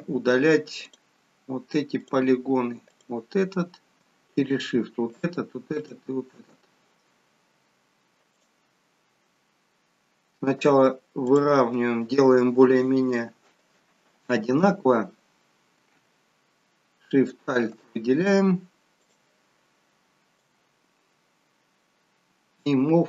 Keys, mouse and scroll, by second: 0.8 click, 2.0 click, 4.4 shift+click, 5.8 click, 8.4 click, 11.3 click, 17.2 alt+shift+click, 19.0 click, 20.4 click.